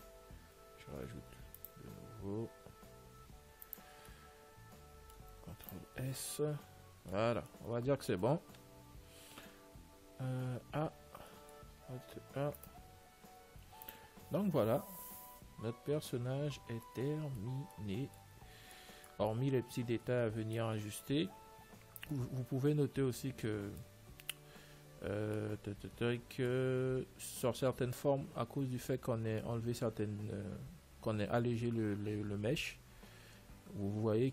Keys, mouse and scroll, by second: 1.6 ctrl+r, 4.8-6.3 middle drag, 5.9 ctrl+s, 6.2 Tab, 6.6-9.6 middle drag, 10.0 alt+a, 10.6 a, 11.3-13.0 middle drag, 12.2 alt+a, 13.0-14.8 right drag, 14.1 ctrl+s, 17.4-21.6 middle drag, 22.4-24.4 middle drag, 25.1-27.6 middle drag.